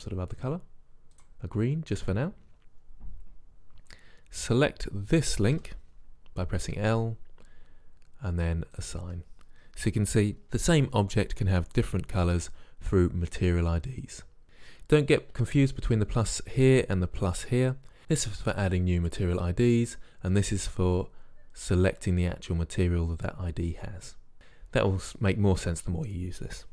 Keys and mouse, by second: 5.8 l, 8.9-10.4 drag.